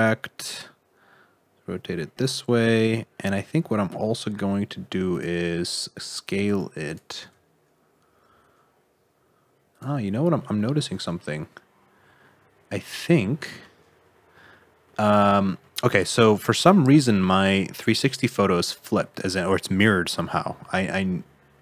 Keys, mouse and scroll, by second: 2.4-3.1 scroll up 6, 3.1 shift+middle click, 3.5 s, 6.4 g, 7.2 alt+z, 7.8-8.2 scroll up 2, 8.2 g, 10.0-10.3 scroll down 3, 10.3 middle click, 10.7 alt+z, 11.1 middle click, 13.7-14.7 scroll up 3, 14.8 middle click, 17.0 middle click, 18.8 middle click, 20.3 middle click.